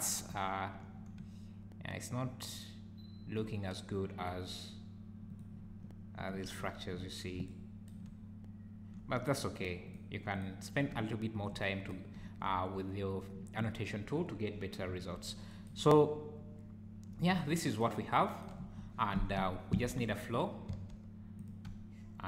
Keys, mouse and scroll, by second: 0.3 `, 1.2 `, 10.9 `, 12.1 `, 14.8 `, 15.5 `, 15.8 `, 17.3 `, 19.5 scroll down 1, 19.8 shift+a, 20.7 s, 21.6 `.